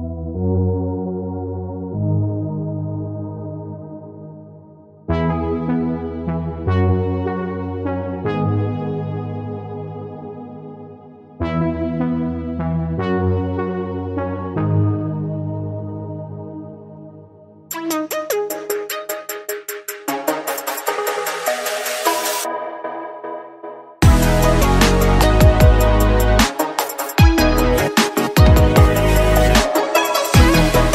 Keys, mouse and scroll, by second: 2.7-5.8 drag, 5.8-7.5 middle drag, 7.5-10.0 drag, 10.0 Tab, 11.1-12.8 drag, 12.8 Tab, 13.1-13.7 scroll up 2, 13.7-14.9 shift+middle drag, 14.9 click, 16.2 click, 16.8 click, 17.7 middle click, 18.0-18.6 scroll up 4, 18.6 click, 19.7 click, 21.8 middle click, 22.7 click, 23.6-24.9 middle drag, 24.9 click, 25.6 middle click, 26.4 click, 28.6 Tab, 28.9 scroll down 5, 29.1 click, 29.4-30.5 middle drag, 30.5-30.9 scroll down 2.